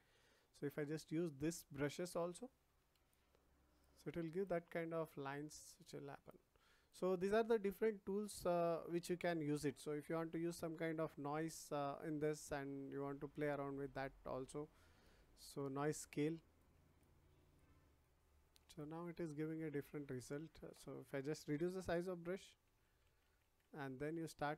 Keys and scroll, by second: 21.8 [.